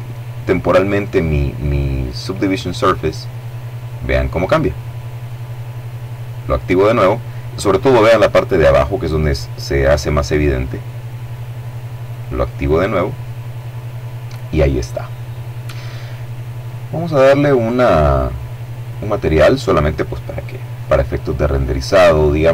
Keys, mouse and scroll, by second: 2.7 click, 11.4 click, 16.0-17.0 middle drag, 17.2 click, 18.2 click, 21.9 click.